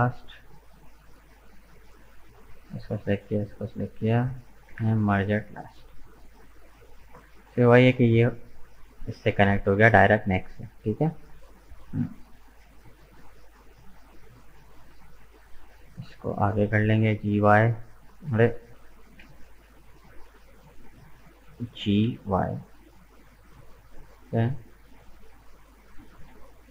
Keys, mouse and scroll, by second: 0.3-2.0 middle drag, 2.0 right click, 3.0 shift+right click, 3.4-4.7 middle drag, 4.7 m, 5.5 scroll down 2, 5.8 middle click, 6.7-7.2 scroll down 2, 7.2 right click, 7.5-10.7 middle drag, 10.7-11.1 scroll down 2, 11.1-13.4 middle drag, 13.4 click, 14.3 right click, 14.9 shift+right click, 15.3 shift+right click, 15.6-16.7 middle drag, 16.7 g, 19.1 ctrl+z, 21.0 shift+right click, 21.8 g, 24.3 middle click, 25.1 right click, 25.6 shift+right click, 26.0 shift+right click, 26.4-26.7 scroll down 2.